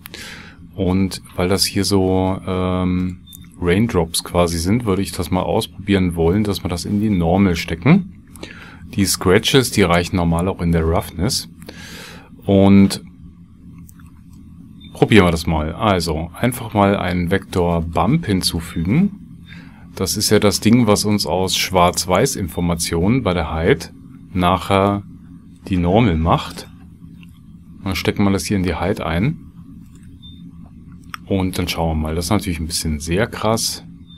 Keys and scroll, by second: 10.6 shift+a, 15.6 shift+a.